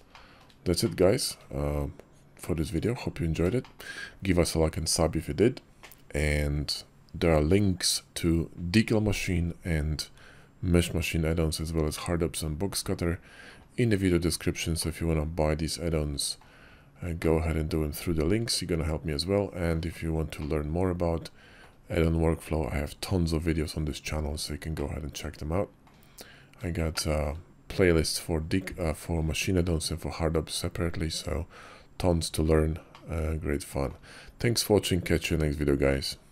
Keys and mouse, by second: 0.0 shift+drag, 1.1 shift+click, 2.6 click, 3.5 shift+click, 14.6-16.2 middle drag, 17.1-19.6 middle drag, 20.3-21.5 middle drag, 24.6-25.7 middle drag, 26.8-27.1 shift+middle drag, 32.8-33.8 middle drag.